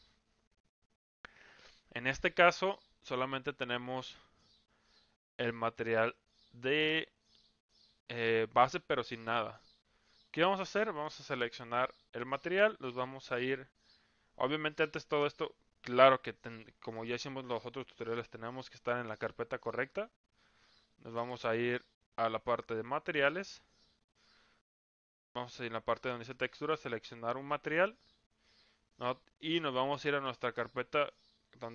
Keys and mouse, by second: 6.1-7.4 middle drag, 15.1 click, 23.3 click.